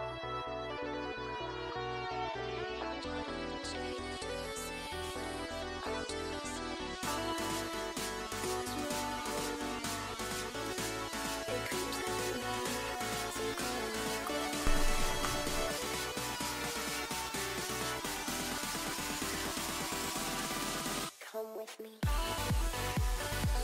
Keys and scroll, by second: 0.3 s, 20.9 s.